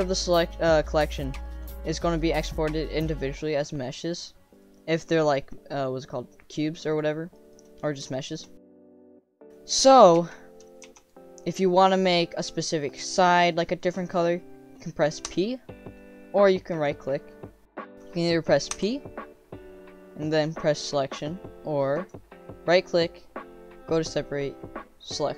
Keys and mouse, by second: 1.4 middle click, 1.9 click, 2.9 click, 3.8 click, 4.6 click, 6.9 click, 7.3 middle click, 8.1 shift+middle click, 10.1 1, 10.8 3, 10.9 click, 11.5 middle click, 12.7 middle click, 13.4 click, 15.2 p, 16.9-17.6 drag, 18.7 p, 22.0 click.